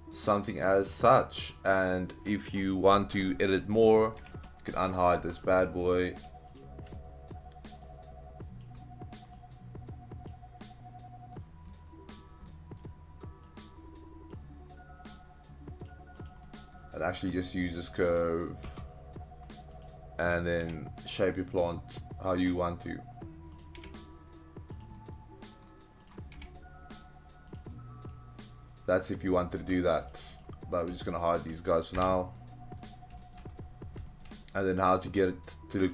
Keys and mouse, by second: 0.4-1.9 middle drag, 4.2 alt+h, 4.7-5.1 middle drag, 5.9 click, 6.5 shift+click, 7.0-7.4 middle drag, 7.9-8.6 drag, 9.4-10.3 drag, 10.6-11.4 middle drag, 11.7-12.1 middle drag, 12.5-12.8 middle drag, 13.4-14.4 drag, 15.1-15.9 drag, 16.4-16.8 middle drag, 17.3 click, 17.6 middle drag, 17.9 shift+middle drag, 18.2 middle drag, 18.6 Tab, 19.8 click, 20.6 g, 22.4 drag, 23.6 click, 23.8 g, 24.8 click, 24.9-25.6 middle drag, 26.1 click, 26.4 g, 27.5 drag, 27.7-29.4 middle drag, 29.6 Tab, 30.1 click, 30.4 click, 31.1 shift+click, 31.9 h, 32.4-32.8 middle drag, 33.2 shift+middle click, 34.1 shift+middle click, 34.4 middle drag.